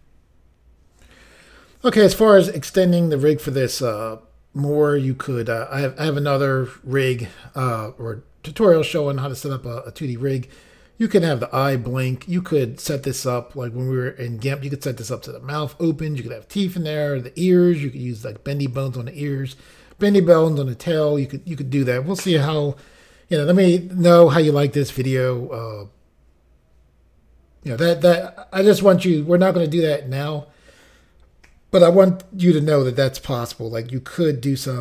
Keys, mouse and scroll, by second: 0.2 Pause.